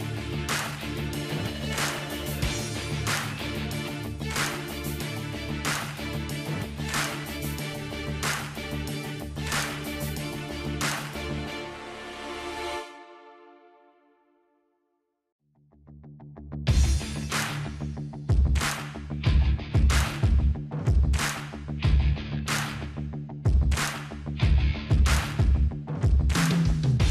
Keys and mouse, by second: 0.1-2.7 drag, 0.1-2.3 right drag, 1.2-2.2 middle drag, 2.7-4.9 middle drag, 4.9 click, 6.1 middle click, 6.4-7.4 drag, 8.7-9.9 middle drag, 9.4-10.4 drag, 10.4-11.5 middle drag, 10.6-11.9 drag, 11.9-13.1 middle drag, 12.9 p, 13.8-15.9 drag, 14.7 alt+h, 15.1 middle click, 15.9 middle click, 16.3-19.0 drag, 17.7 h, 19.0 middle click, 19.3 Tab, 20.7 a, 20.9-21.9 middle drag, 22.0-23.5 drag, 22.7 right click, 23.6 click, 23.6 right click, 24.4 click, 24.4 right click, 24.7 Tab, 24.8 click, 24.9 a, 25.5-27.1 drag.